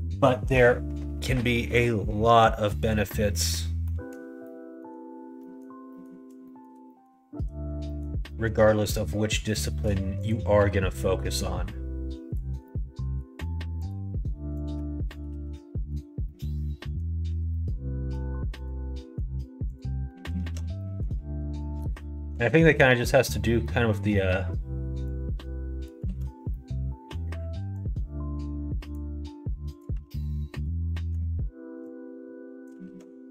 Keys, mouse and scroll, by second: 3.0 scroll up 1, 3.1 middle click, 3.8 middle click, 4.4 middle click, 5.4 middle click, 5.8 middle click, 5.8 scroll up 1, 6.4 shift+middle click, 6.8 middle click, 7.8 middle click, 8.7 middle click, 9.5 shift+middle click, 10.2 click, 11.3-12.3 drag, 12.6-13.8 middle drag, 13.8 click, 14.5 click, 15.2 alt+z, 15.5 middle click, 16.2-16.9 scroll up 1, 16.9 middle click, 17.4 scroll up 1, 17.5 middle click, 18.6 click, 18.9 middle click, 19.7 click, 20.0 middle click, 20.3 alt+z, 20.7 middle click, 21.5 middle click, 22.1 alt+z, 22.8 3, 23.1 click, 23.6 middle click, 25.0 click, 26.0 ctrl+z, 26.4 middle click, 27.7-29.0 drag, 29.6 click, 29.9 alt+z, 30.5 click, 30.8 middle click, 31.8 click, 32.8 ctrl+z.